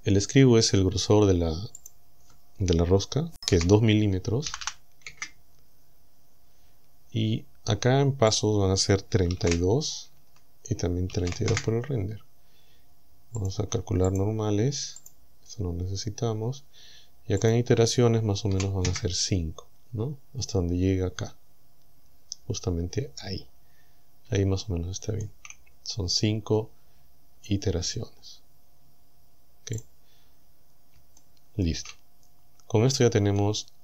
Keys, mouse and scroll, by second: 1.8 click, 3.5 KP_2, 4.5 m, 5.1 KP_Enter, 8.4 click, 9.5 KP_2, 10.2 Tab, 11.3 KP_2, 11.5 KP_Enter, 13.4 click, 14.1 click, 15.1 click, 17.5 click, 18.5 KP_5, 18.9 KP_Enter, 24.0-24.3 scroll down 2, 24.6 shift+middle click, 29.8 click, 31.2 shift+middle click, 32.2-32.7 scroll up 2, 32.7-33.2 scroll down 2, 33.4-33.8 middle drag.